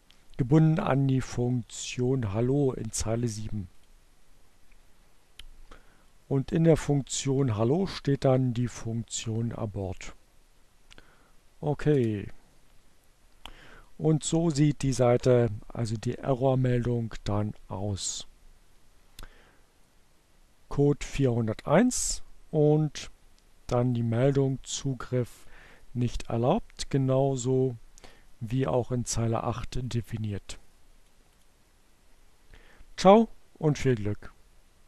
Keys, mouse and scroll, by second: 10.9 Return, 19.2-20.3 drag, 22.7-24.7 drag, 24.9-28.0 drag, 29.8 click, 31.1 click.